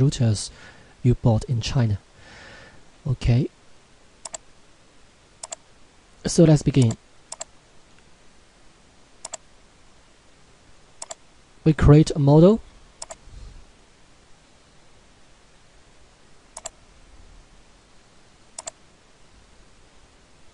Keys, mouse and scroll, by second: 4.2 click, 16.6 click.